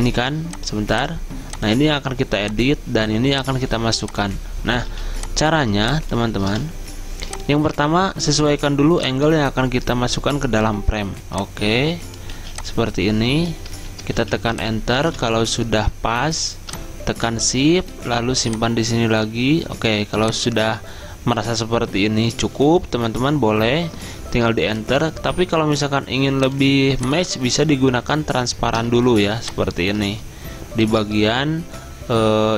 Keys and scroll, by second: 6.5 v, 13.0 z, 14.0 Return, 14.3 z, 15.1 v, 24.4 Return.